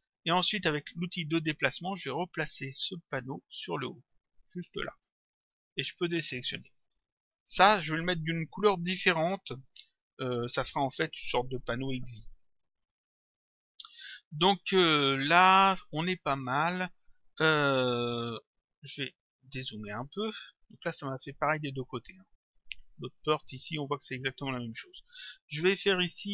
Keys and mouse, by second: 1.2 click, 2.9 click, 6.2 click, 20.7 click, 25.3 click.